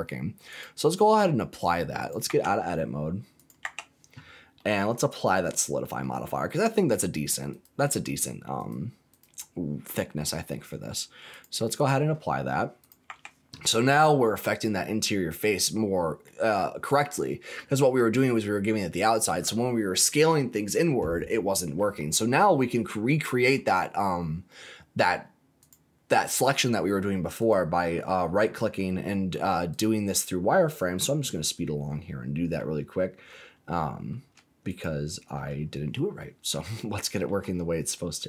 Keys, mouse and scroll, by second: 0.4-1.7 drag, 1.9 click, 2.2 Tab, 3.3 click, 3.6 Tab, 4.2-4.5 scroll down 2, 4.5 middle click, 4.9-5.4 scroll down 3, 5.4 middle click, 7.5 click, 7.7 click, 8.5 click, 9.1 click, 11.3 click, 12.8 click, 13.0 Tab, 14.4 scroll up 2, 15.1-16.2 middle drag, 16.2-17.3 scroll down 3, 17.3 scroll down 2, 17.7 middle click, 21.8-22.2 scroll up 3, 22.5 middle click, 23.6-24.3 scroll up 3, 24.4 middle click, 25.5 click, 27.3 alt+click, 28.3 middle click, 28.8 scroll down 1, 29.8 click, 30.1-30.8 scroll up 5, 30.8-32.5 middle drag, 32.7-33.2 scroll up 3, 33.2 middle click, 34.6 alt+shift+click, 35.5-36.1 scroll down 4, 36.1-37.2 middle drag, 37.5-37.9 scroll up 3, 37.9 middle click.